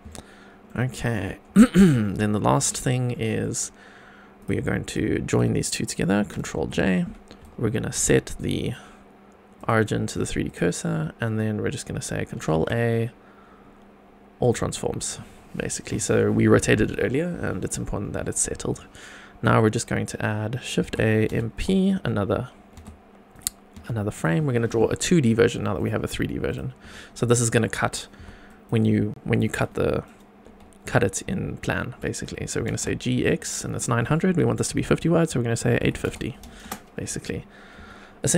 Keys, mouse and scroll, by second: 0.1-0.7 shift+middle drag, 0.8-1.3 scroll up 4, 1.5-1.8 middle drag, 2.0 shift+middle click, 2.8 scroll down 2, 3.1 middle drag, 3.6 scroll up 2, 4.4 click, 4.9 shift+click, 6.6 ctrl+j, 7.4 shift+right click, 8.4-9.6 right drag, 10.4 click, 12.5 ctrl+a, 15.4-15.9 scroll down 2, 17.6 click, 18.0-18.5 scroll up 3, 18.7 shift+right click, 20.8 shift+a, 22.7 g, 23.3 click, 23.7 g, 24.1 click, 24.4 scroll down 2, 24.7 middle drag, 25.7 click, 26.1 scroll up 2, 26.5 click, 26.8 Tab, 27.2-27.5 scroll down 1, 27.6 shift+middle click, 28.1 2, 28.5 click, 32.5 g, 32.7 y, 35.7 KP_8, 35.8 KP_5, 36.0 KP_0, 36.6 Return, 37.7 Tab.